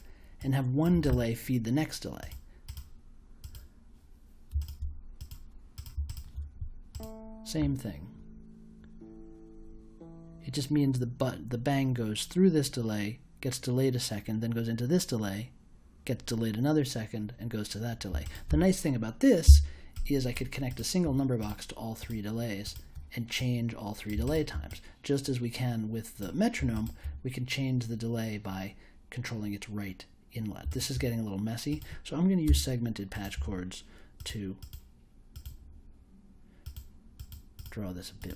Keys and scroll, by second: 0.9 1, 19.4 i, 32.4 BackSpace.